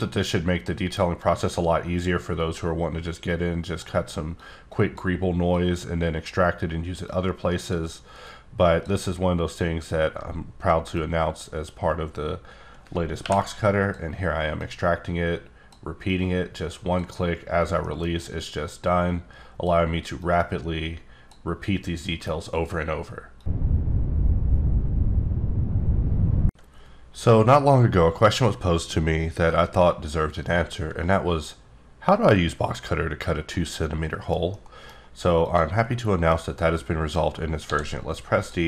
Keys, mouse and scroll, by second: 0.0 click, 1.5-2.8 drag, 3.6-3.9 drag, 4.7 click, 5.9-6.5 drag, 7.1 click, 8.5 click, 9.5-10.9 scroll down 1, 10.9 click, 13.2 y, 14.6 click, 16.1 click, 17.5 scroll down 2, 17.8 middle click, 18.6 click, 20.2 click, 34.8 middle click, 35.3 click, 35.7 middle click, 36.7 scroll up 2, 37.5 d, 38.3 click.